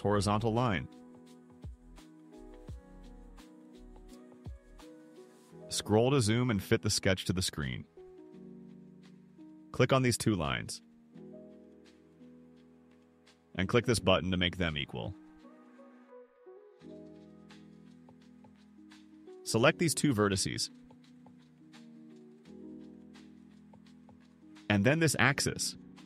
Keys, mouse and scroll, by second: 0.5 click, 2.1 4, 2.8 0, 3.1 0, 3.6 Return, 4.6-5.3 scroll down 6, 7.2 scroll up 2, 7.5 right click, 10.1 click, 11.5 click, 16.0 click, 21.4 click, 23.1 click, 25.9 click.